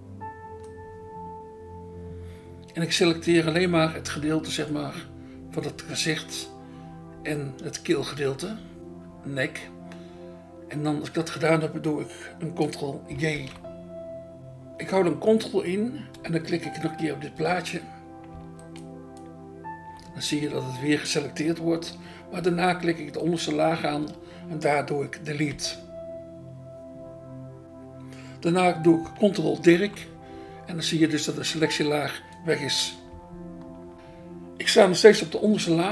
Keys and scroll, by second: 13.3 ctrl+j, 17.3 BackSpace, 23.9 BackSpace, 25.5 Delete, 29.7 ctrl+d, 35.2 BackSpace.